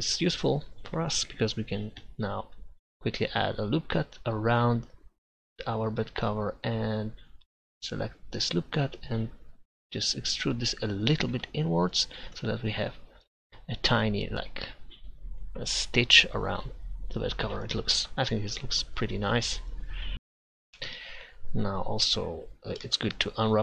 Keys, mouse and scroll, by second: 2.5 ctrl+r, 8.8-10.0 right drag, 10.0 e, 11.5 Tab, 21.0 Tab.